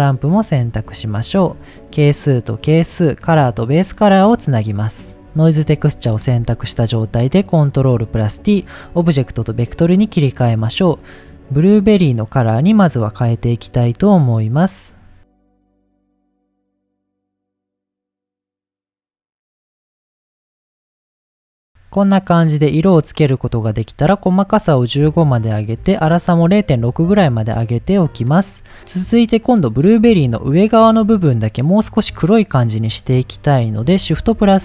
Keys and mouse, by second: 1.3 click, 2.0-3.2 drag, 3.8-5.1 drag, 5.2 click, 6.2 ctrl+t, 7.4-8.0 drag, 8.6 middle click, 13.4 drag, 16.2 click, 18.2 drag, 19.1 click, 23.7 click, 24.6-26.8 drag, 33.5 middle click, 34.2 shift+a.